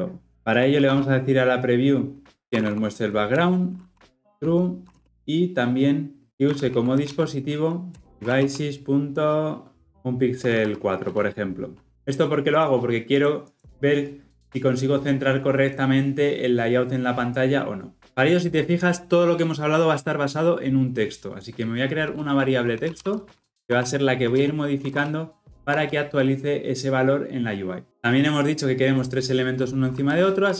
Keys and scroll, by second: 3.4 Return, 7.9 Return, 11.2 Return.